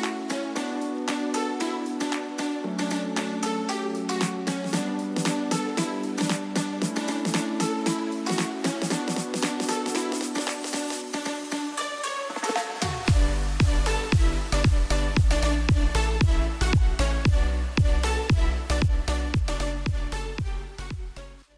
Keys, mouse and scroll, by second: 0.9 ctrl+click, 1.2 ctrl+d, 2.4 v.